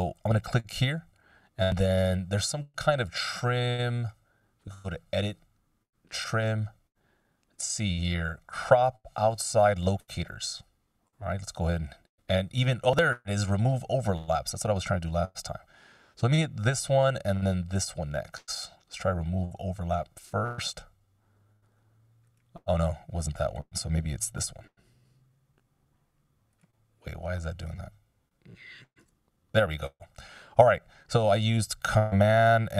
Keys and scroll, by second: 24.6 super+/.